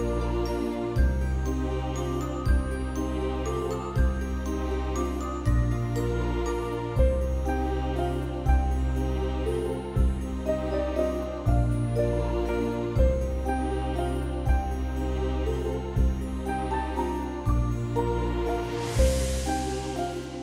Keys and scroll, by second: 4.5 ctrl+c, 7.0 ctrl+v, 8.2 ctrl+BackSpace, 9.5 ctrl+=, 9.6 ctrl+=, 9.7 ctrl+=, 9.9 ctrl+space, 10.9 b, 14.1 x.